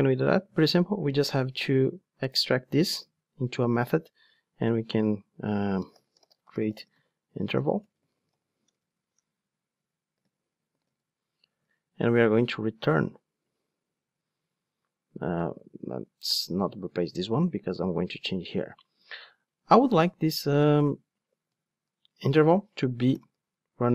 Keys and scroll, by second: 3.1 alt+super+m, 15.1 super+z.